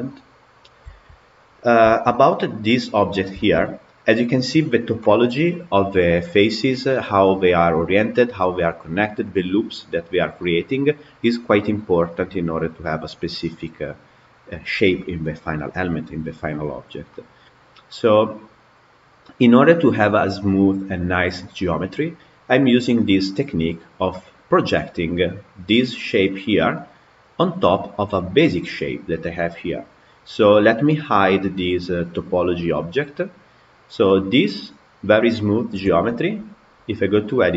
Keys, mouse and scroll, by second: 1.0 Tab, 1.8-6.4 shift+middle drag, 6.8-9.8 middle drag, 10.3-13.3 middle drag, 17.0-20.0 middle drag, 22.4 click, 23.0-26.0 middle drag, 26.6-31.0 middle drag, 32.9 click, 33.5 click, 33.9-37.2 middle drag, 37.2 Tab.